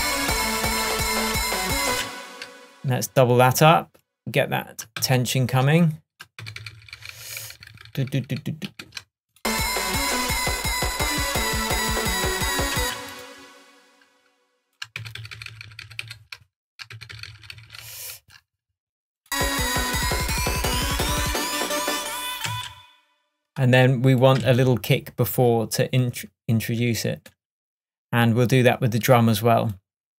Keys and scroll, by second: 2.0 space, 5.1 super+d, 6.5 super+d, 12.9 space, 15.1 super+d, 22.6 space.